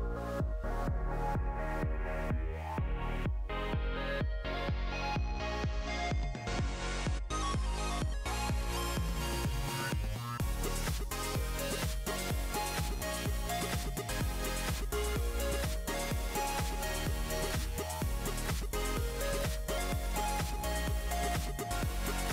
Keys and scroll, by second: 4.3-5.2 typing, 7.3 typing.